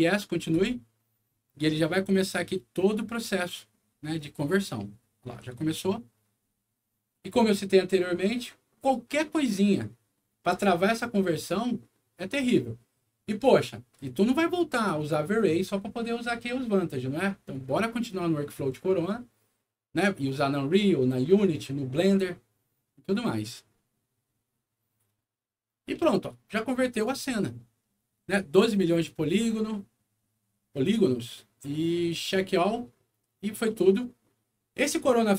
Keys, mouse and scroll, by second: 0.5 click, 27.0 click, 30.8 click, 32.0 click.